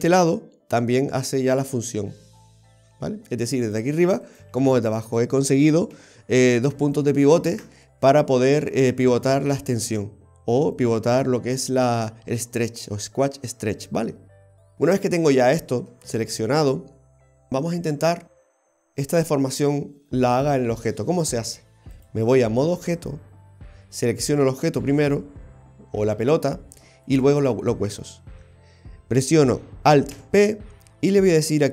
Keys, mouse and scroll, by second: 2.1 g, 4.3 right click, 4.6 g, 6.0 ctrl+z, 6.4 ctrl+z, 6.8 ctrl+z, 22.0 click, 24.7 right click, 27.1 shift+right click, 30.2 ctrl+p.